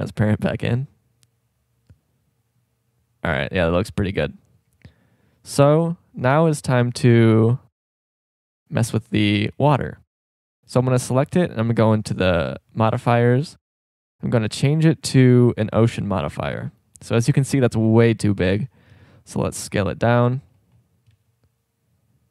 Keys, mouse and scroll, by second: 1.2-1.6 drag, 5.3 middle click, 5.8 z, 6.3 z, 8.3-8.9 right drag, 19.1 s, 21.3 s.